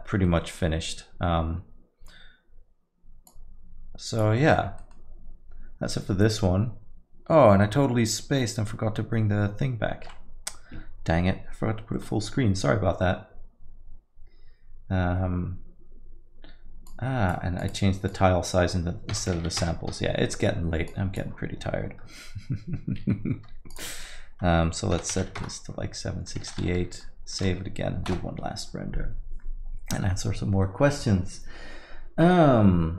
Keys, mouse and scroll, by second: 4.3 click, 4.5 middle click, 4.7 scroll down 2, 26.4 middle click.